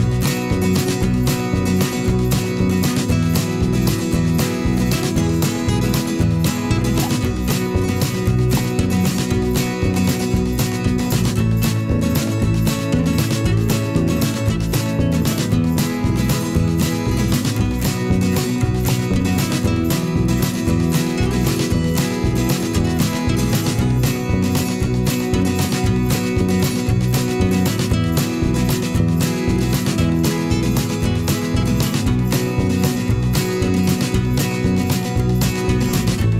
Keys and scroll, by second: 2.1 ctrl+t, 6.0 Down, 9.3 ctrl+t, 12.6 ctrl+0, 21.2 ctrl+j, 29.7 ctrl+t, 33.2 Left, 33.7 Right, 34.2 Return.